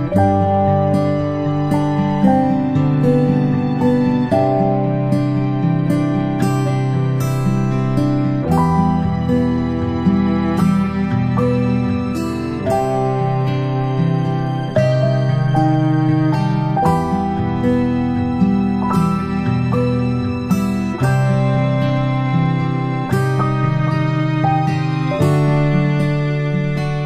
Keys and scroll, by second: 1.1 ctrl+shift+g, 1.7 ctrl+shift+[, 2.1 ctrl+], 2.4 ctrl+], 10.2 ctrl+shift+[, 10.5 ctrl+], 10.8 ctrl+], 11.5 ctrl+[, 11.7 ctrl+[, 14.3 ctrl+shift+[, 14.7 ctrl+shift+], 16.9 Down, 17.1 Down, 17.3 Down, 17.3 Down, 17.6 Up, 18.5 Down, 18.6 Down, 18.9 Down, 19.1 Down, 19.5 Down, 19.7 Down, 20.3 Down, 20.5 Down, 20.7 Down, 21.3 Down, 22.0 Down, 22.2 Down, 22.7 Down, 23.1 Down, 23.3 Down.